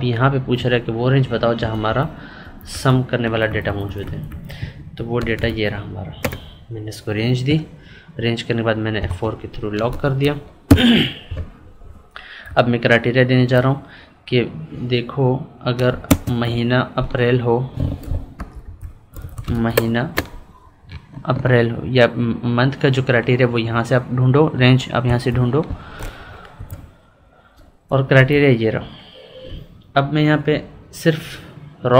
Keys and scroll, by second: 1.5 Left, 2.3 Up, 2.6 Left, 4.7 ctrl+Right, 8.9 F4, 12.4 Left, 16.0 ctrl+space, 18.3 Right, 18.6 Left, 19.0 ctrl+Up, 25.0 F4, 28.1 Up.